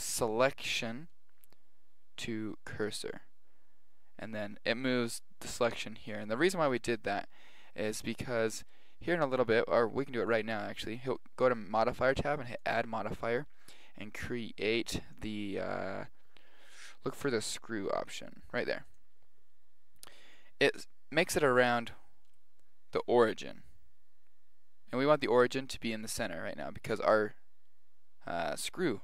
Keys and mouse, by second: 8.1-10.0 middle drag, 10.3-12.1 drag, 12.6 click, 21.6 g.